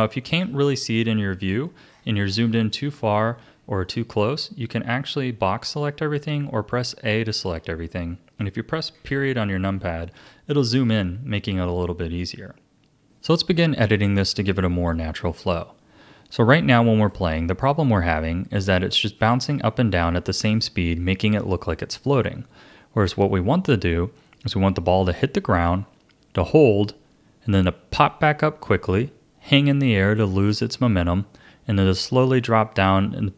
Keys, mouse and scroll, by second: 1.5-1.9 scroll down 3, 1.9-2.9 scroll up 6, 2.9-3.6 scroll down 11, 3.8-6.9 shift+middle drag, 7.4 a, 8.9 KP_Decimal, 12.9 a, 13.0 click, 17.0-20.0 drag.